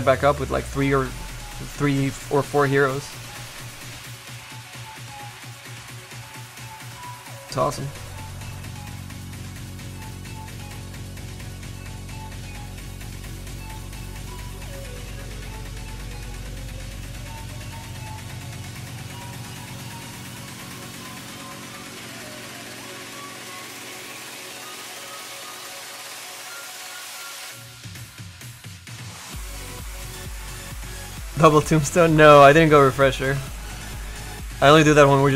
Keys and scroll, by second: 10.2 s, 12.4 s.